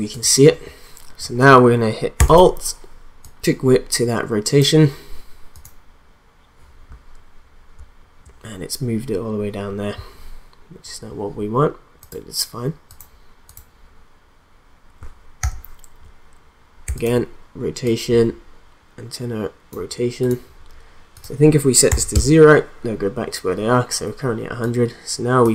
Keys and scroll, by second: 15.4 r, 21.9 0, 22.1 Return.